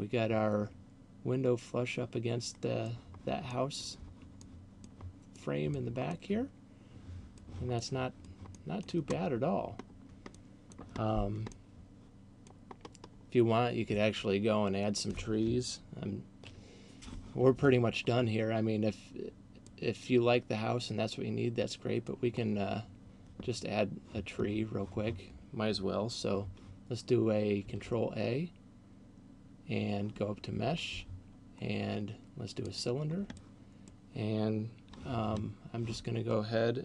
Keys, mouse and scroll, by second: 3.4 middle click, 4.4 middle click, 5.4 middle click, 6.2 middle click, 7.9 middle click, 8.2 middle click, 9.2 scroll down 4, 9.9 scroll down 1, 10.7 middle click, 11.2 scroll down 1, 11.7 middle click, 12.9-13.4 scroll up 2, 13.7-14.2 scroll down 1, 15.9-16.4 ctrl+KP_6, 19.7 middle click, 27.9 shift+a, 33.2 middle click.